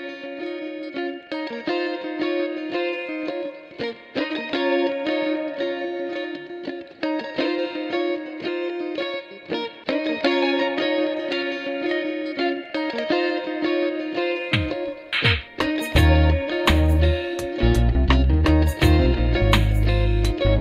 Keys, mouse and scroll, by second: 1.0 double click, 3.5 double click, 4.4 space, 6.8 double click, 9.8 double click, 13.6 double click, 16.2 ctrl+0, 19.3 shift+click.